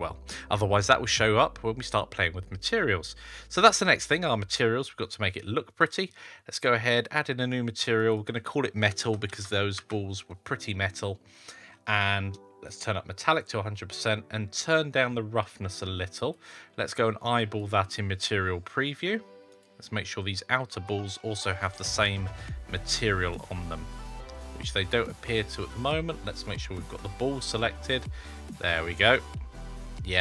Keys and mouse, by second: 2.5-3.8 middle drag, 7.8 click, 8.1-10.9 drag, 12.5-13.2 drag, 15.4 click, 17.2 click, 19.4 click, 25.4 click, 26.4 click, 26.8 click, 29.2-30.2 middle drag.